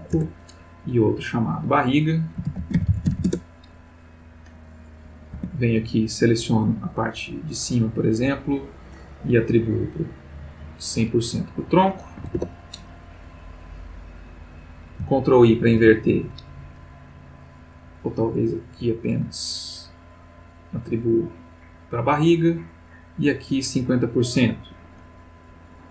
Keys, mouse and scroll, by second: 0.1 Return, 1.3 click, 2.4-3.1 typing, 3.2 Return, 4.7 click, 5.4 Tab, 6.2-8.9 drag, 9.7 click, 10.5 click, 12.2 1, 12.4 Return, 13.8 click, 15.0 ctrl+click, 15.7 ctrl+i, 17.7 click, 19.8 click, 20.6 click, 22.2-23.7 drag, 25.8 click.